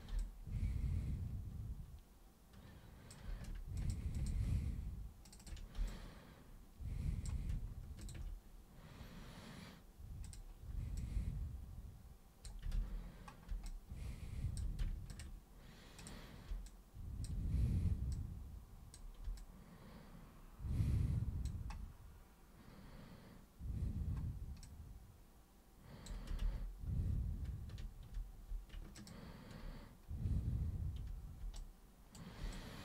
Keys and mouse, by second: 0.2-3.1 alt+super+drag, 3.7 ctrl+shift+click, 4.1 ctrl+shift+click, 5.2 ctrl+shift+click, 5.8-7.2 alt+drag, 8.0 ctrl+shift+click, 10.3 super+click, 11.0-12.4 alt+super+drag, 12.8 ctrl+super+z, 13.6 alt+super+click, 15.0 ctrl+shift+super+click, 16.0 super+click, 16.6 alt+super+click, 18.1 super+click, 19.4-21.4 alt+super+drag, 24.6-26.1 alt+super+drag, 26.4 ctrl+super+z, 26.9 ctrl+super+z, 28.9 ctrl+super+click, 31.5 super+right click, 32.5-32.8 alt+super+drag.